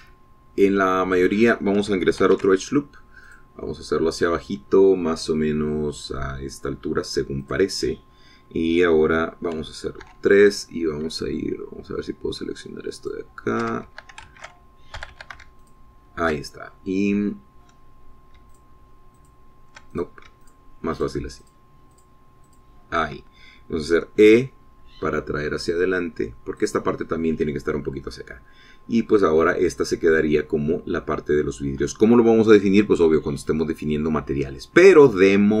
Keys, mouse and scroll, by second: 3.8 ctrl+r, 4.8 click, 9.0 click, 11.5 3, 14.5 alt+shift+click, 15.4 alt+shift+a, 16.5 a, 17.2 alt+shift+click, 20.0 shift+click, 20.7 shift+click, 21.5 shift+click, 22.0 shift+click, 22.5 shift+click, 22.9 shift+click, 23.4 shift+click, 24.0 shift+click, 25.5 e, 28.2 click, 35.1-35.6 scroll down 1.